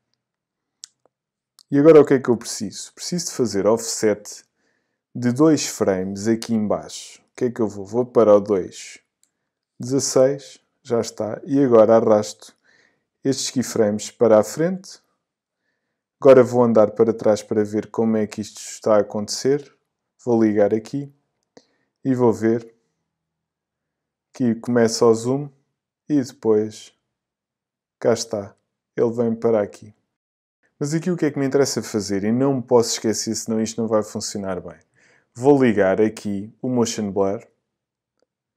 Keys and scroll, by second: 9.5 BackSpace, 9.8 6.